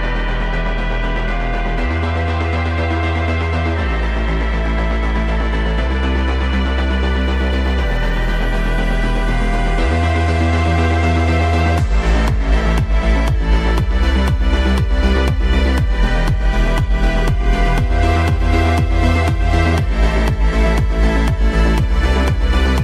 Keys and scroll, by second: 8.2 F3, 8.7 Escape, 12.0 shift+Page_Up, 18.8 Delete, 20.2 F3, 20.6 Escape.